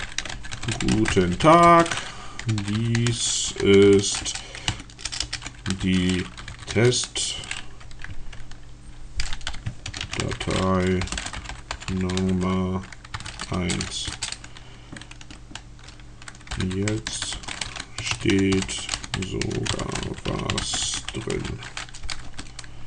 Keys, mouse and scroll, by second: 0.0-7.4 typing, 9.3-13.0 typing, 13.6 Return, 14.0 Return, 16.3-22.2 typing.